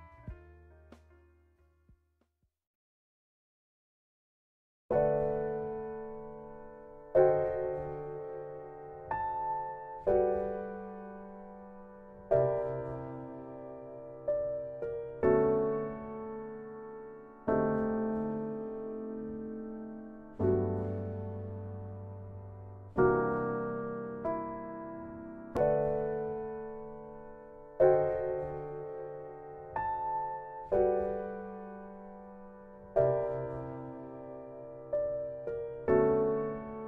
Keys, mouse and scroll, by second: 1.0 click, 4.5 click, 9.2 middle click, 25.7 [, 28.8 click, 33.8 click.